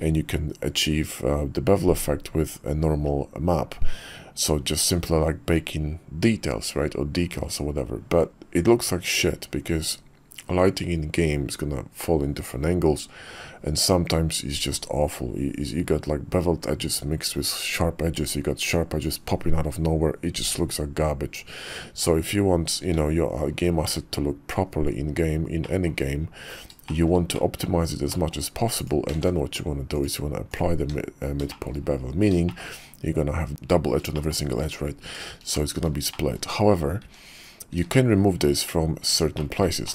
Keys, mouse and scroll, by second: 21.9 `, 22.8 `, 23.8 `, 24.6 KP_5, 25.6 middle drag, 26.1 KP_5, 26.9 shift+middle click, 27.3 middle click, 28.1 click, 29.2 ctrl+`, 30.8 Tab, 31.5 shift+click, 32.5 shift+middle click, 34.1 shift+click, 35.5 middle click, 35.8 click, 36.1 shift+click, 37.0 `, 37.7 `, 38.2 KP_5, 39.4 shift+click, 39.8 click.